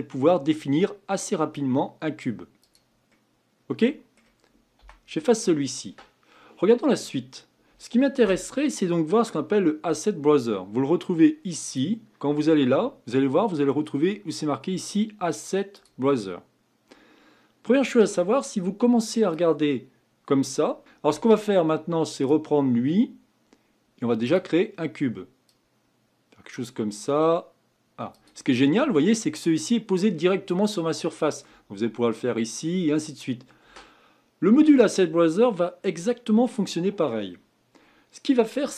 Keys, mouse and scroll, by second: 3.1-4.8 middle drag, 4.8 Delete, 8.2 Escape, 11.7-14.8 drag, 19.3-20.8 drag, 20.8 Delete, 22.2-24.3 drag, 25.5 click, 28.8-29.5 scroll up 4, 29.5-30.1 scroll down 3, 30.1-33.2 middle drag.